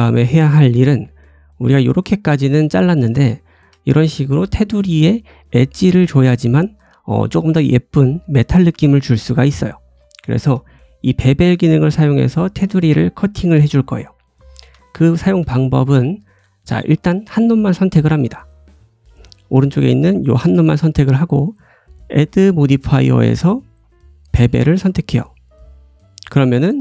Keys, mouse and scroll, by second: 0.8-1.4 scroll up 4, 1.3-4.9 drag, 1.9 scroll down 1, 3.3 shift+middle click, 3.5-4.5 shift+scroll up 4, 4.2 middle click, 4.9-7.0 right drag, 9.6 scroll down 2, 10.1 shift+right drag, 12.7-13.5 right drag, 13.4-13.8 scroll down 2, 13.8-15.6 shift+middle drag, 14.8 scroll up 1, 15.6 click, 15.8-17.0 middle drag, 16.1-17.0 scroll down 2, 17.0 click, 17.1 middle click, 17.6 click, 17.7-19.2 middle drag, 18.2-18.7 scroll up 1, 19.2-23.4 drag, 19.7 g, 20.4 ctrl+z, 25.1-25.6 scroll up 2, 26.3 shift+middle click.